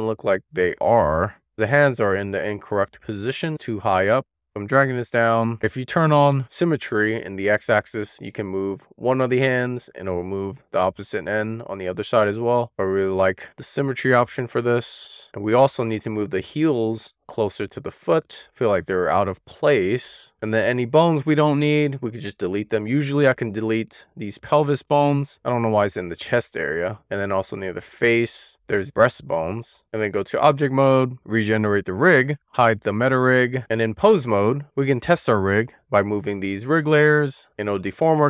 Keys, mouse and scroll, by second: 1.4-2.4 scroll up 1, 2.4-2.8 scroll down 1, 2.8-3.3 scroll up 1, 4.2 middle click, 4.5 click, 6.3 click, 6.8 click, 7.3 click, 8.3 click, 9.1 super+z, 9.7 scroll up 1, 9.9 scroll down 1, 10.0-11.3 drag, 11.4 middle click, 12.0 shift+middle click, 12.2 scroll up 2, 12.3 middle click, 12.4 click, 12.8 scroll up 1, 13.0 click, 13.6 scroll up 1, 13.9-14.3 scroll down 6, 14.1 middle click, 14.3 shift+middle click, 14.6 shift+middle click, 15.0 middle click, 15.6 click, 16.3 shift+middle click, 16.4 scroll up 2, 16.5 shift+middle click, 17.2 click, 17.7 middle click, 17.9 super+z, 18.0 middle click, 18.1 click, 18.6 middle click, 19.0 middle click, 19.3 middle click, 19.5 scroll up 2, 19.6 scroll down 2, 19.7-20.8 shift+middle drag, 20.8 scroll up 1, 21.0-22.0 scroll down 4, 22.0 middle click, 22.8 click, 23.4 middle click, 25.2 x, 26.7 scroll down 1, 26.9-29.7 shift+middle drag, 29.9 click, 31.0-31.8 scroll down 1, 31.8 click, 32.8 click, 33.6 click, 35.0 click, 35.6 middle click, 36.5 w, 36.8 middle click, 38.0 click.